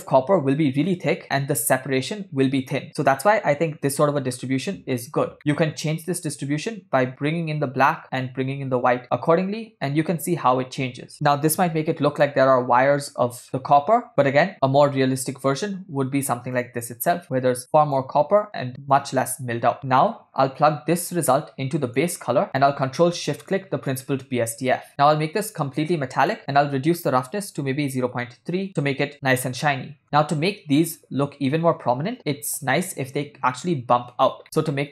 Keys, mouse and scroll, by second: 5.4 middle click, 6.7-8.4 drag, 9.1-12.3 drag, 14.1-14.5 drag, 16.6-18.0 drag, 19.0-20.7 drag, 20.7 middle click, 21.0 click, 22.5 click, 22.6 middle click, 24.1-24.5 ctrl+shift+drag, 25.2-26.3 drag, 26.4-28.7 drag, 29.1 middle click, 34.7 ctrl+middle click.